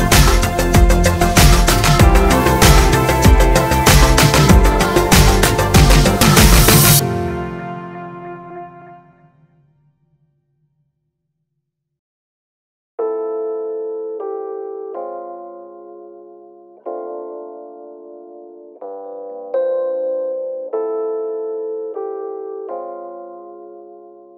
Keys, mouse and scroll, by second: 0.4 click, 1.3 click, 2.5 click, 2.8-24.3 drag, 4.6 Return, 8.7 KP_Enter, 9.2 z, 19.6 KP_Enter.